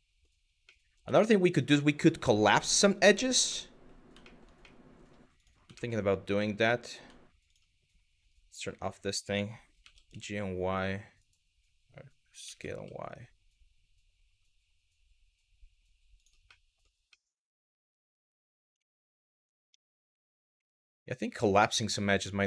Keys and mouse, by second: 0.4 middle click, 0.8 shift+middle click, 3.1 middle click, 3.9 shift+middle click, 4.3 middle click, 5.0 click, 5.4 shift+middle click, 6.1 middle click, 7.1 shift+click, 8.4 click, 9.4 g, 9.7 y, 15.8 click, 16.2 middle click, 16.7-18.0 middle drag, 18.5 shift+middle click, 19.3 ctrl+z, 19.7 ctrl+z, 20.2 middle click, 21.3 middle click.